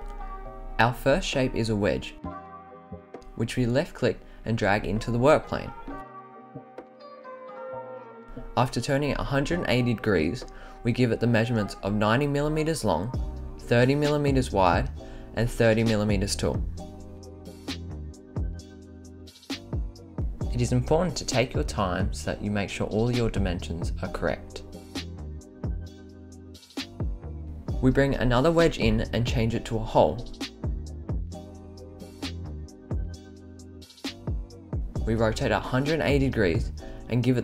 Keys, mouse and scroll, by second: 0.5 scroll down 3, 2.8-4.0 scroll up 5, 5.1 click, 7.1 click, 8.6-11.0 drag, 12.4-16.0 drag, 17.1-19.4 drag, 20.5-23.8 drag, 24.4-25.6 drag, 26.2 click, 27.8 click, 29.0 click, 29.7-31.4 right drag, 33.7 click, 34.9-37.4 drag.